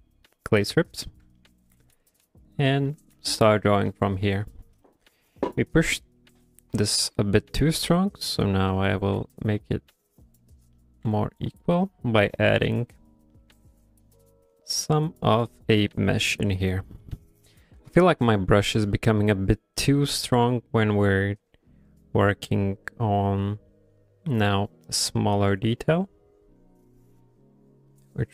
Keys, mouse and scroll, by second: 0.5 click, 1.0 shift+middle click, 1.4 middle click, 1.8 f, 2.3 click, 2.7 click, 2.9 middle click, 3.2 f, 3.6 click, 3.9 click, 4.2 middle click, 4.9 middle click, 6.0 middle click, 7.1 middle click, 7.6 click, 7.9 click, 8.5 click, 8.8 middle click, 9.2 f, 9.6 click, 9.9 click, 10.4 click, 10.5 click, 10.8 middle click, 11.1 f, 11.5 click, 11.9 middle click, 12.3 click, 12.6 click, 13.1 click, 13.4 middle click, 13.8 click, 14.1 click, 14.5 click, 14.9 click, 15.2 click, 15.9 click, 16.1 click, 16.5 click, 17.1 middle click, 18.0 shift+middle click, 18.5 ctrl+middle click, 18.9 middle click, 20.2 shift+middle click, 21.5 click, 21.8 click, 22.3 click, 22.5 click, 22.9 click, 23.2 click, 23.3 click, 23.5 click, 23.7 click, 23.9 click, 24.2 click, 24.5 click, 24.7 click, 24.9 middle click, 25.3 click, 25.6 click, 26.1 click, 26.3 click, 26.6 click, 26.9 click, 27.2 click, 27.7 click, 28.0 click, 28.2 click.